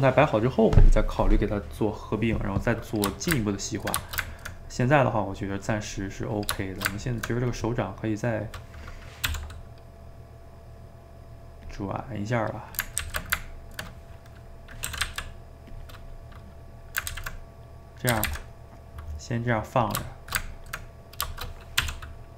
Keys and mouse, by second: 2.2-6.7 middle drag, 6.7 shift+right click, 6.9 ctrl+middle click, 7.6 click, 7.8-9.3 middle drag, 9.3 r, 12.0-13.1 middle drag, 13.1 ctrl+z, 13.4-14.9 ctrl+middle drag, 14.9 r, 15.9-17.1 middle drag, 17.1 ctrl+z, 17.9 middle click, 18.1 a, 18.3 a, 18.5-19.9 middle drag, 19.9 click, 20.1 shift+right click, 20.4-21.8 ctrl+middle drag, 21.8 r.